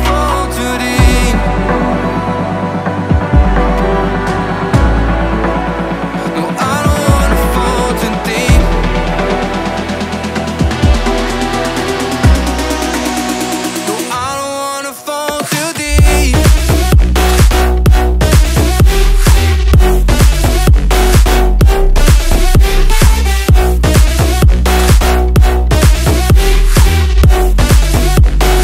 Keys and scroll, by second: 1.1 ctrl+alt+v, 4.5 Up, 5.1 Escape, 7.3 Up, 8.4 o, 10.1 4, 10.2 8, 10.4 Return, 16.7 t, 17.9 shift+x, 18.3 Escape, 19.3 1, 19.5 Return, 24.0 1, 24.1 ., 24.2 5, 24.3 Return, 25.9 ctrl+g.